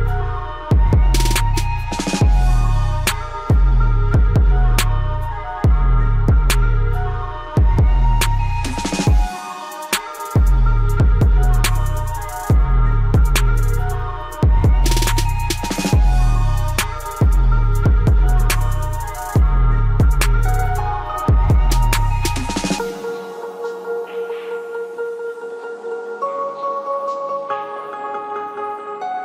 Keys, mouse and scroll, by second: 3.1 click, 13.3 click, 15.9-17.4 scroll up 1, 17.4 click, 19.6 scroll down 1, 22.0-28.2 drag, 28.2 scroll down 1, 28.4 click.